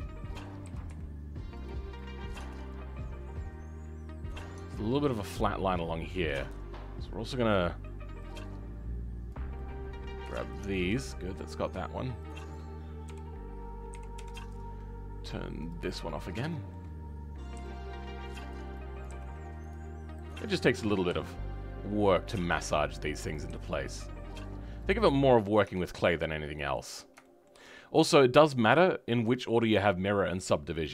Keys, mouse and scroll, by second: 1.9-4.5 middle drag, 4.5 Tab, 10.9-12.5 middle drag, 12.5 shift+click, 13.0 KP_3, 13.9 KP_1, 16.0 scroll up 2, 16.4-17.6 right drag, 16.4 shift+middle click, 17.6 g, 20.8 shift+click, 21.1 g, 25.0-25.6 scroll down 2, 25.6 Tab, 25.9 scroll down 1, 26.1 middle click, 26.8-27.2 scroll down 3, 27.2-30.5 shift+middle drag, 30.5 scroll up 3, 30.8-30.9 middle drag.